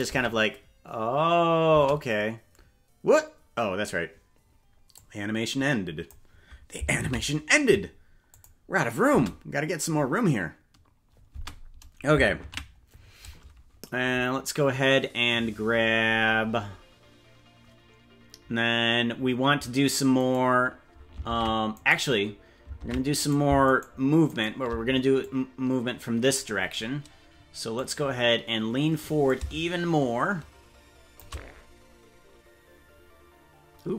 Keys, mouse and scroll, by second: 0.2 space, 1.8 space, 4.9-6.1 drag, 8.5 ctrl+s, 8.7 click, 9.1 space, 11.3 space, 14.1 ctrl+s, 20.3 right click, 21.3 ctrl+Tab, 21.9 right click, 22.8 ctrl+Tab, 23.8 shift+right click, 25.2-26.4 drag, 27.8-29.0 drag, 29.3-31.2 drag.